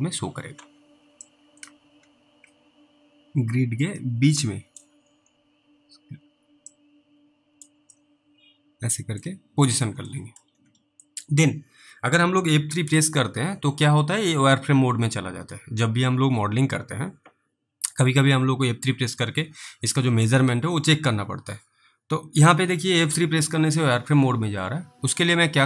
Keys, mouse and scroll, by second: 0.8 Delete, 1.6 click, 5.0 scroll up 2, 7.0 click, 8.2 middle click, 9.6 scroll down 3, 10.4 middle click, 10.5-11.0 scroll down 1, 11.3 middle click, 13.3 F3, 15.4 F3, 23.1 F3.